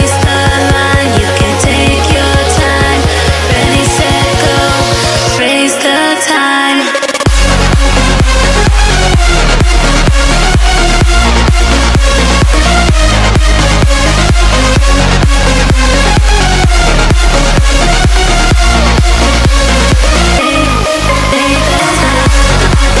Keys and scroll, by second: 7.3 Down, 7.6 Down, 8.0 Down, 8.4 Down, 8.8 Down, 9.2 Down, 10.5 Up, 11.4 Down, 11.8 Down, 12.2 Down, 12.7 Up, 13.5 Down, 13.7 Down, 14.6 Down, 15.1 Down, 15.8 Down, 16.7 Down, 19.4 Down, 19.7 Down, 22.4 Return.